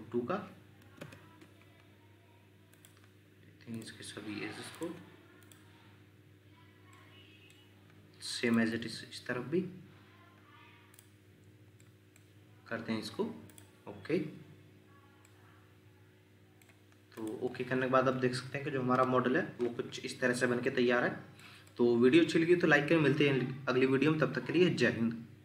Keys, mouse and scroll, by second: 0.8 typing, 1.0 Return, 4.8 shift+click, 6.9 middle click, 11.8 middle click, 15.2 middle click, 17.4 Escape, 18.9 ctrl+7, 20.1 scroll down 1, 20.6 shift+middle click, 21.7 middle click.